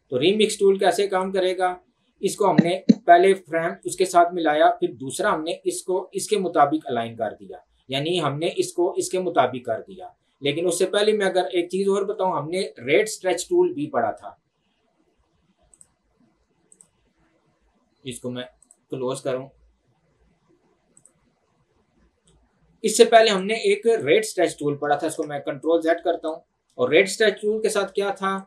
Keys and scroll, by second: 25.1 ctrl+z.